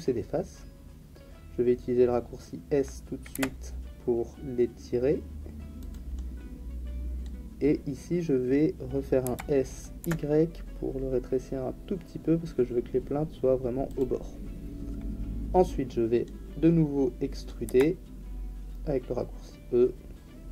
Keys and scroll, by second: 3.3 s, 9.2 s, 10.0 y, 17.6 e.